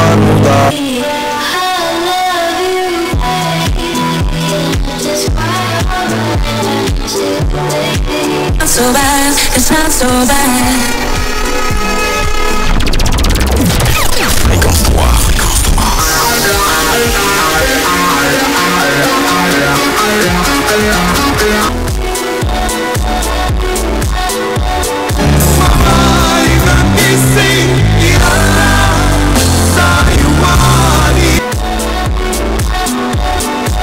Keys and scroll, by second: 0.7 Page_Down, 21.7 Page_Down, 31.4 Page_Down.